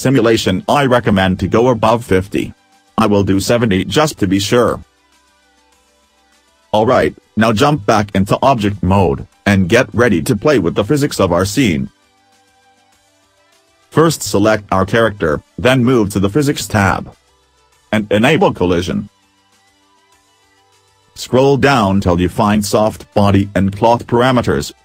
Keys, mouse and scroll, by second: 9.1 click, 10.0 middle click, 12.3 middle click, 14.6 click.